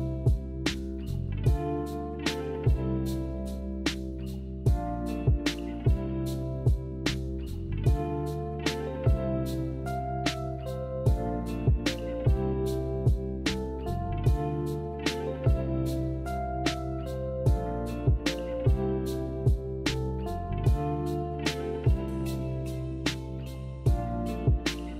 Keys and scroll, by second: 4.2 ctrl+z, 15.3-17.5 typing.